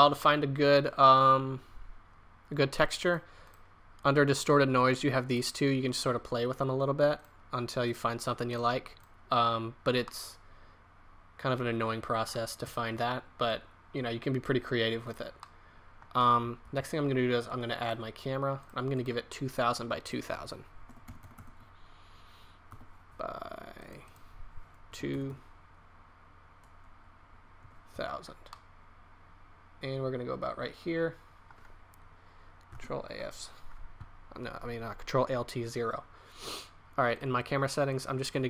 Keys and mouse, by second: 3.0-5.0 middle drag, 5.3-10.3 middle drag, 15.4 click, 16.6 shift+a, 21.3 KP_0, 25.2 KP_0, 32.7 ctrl+alt+KP_0.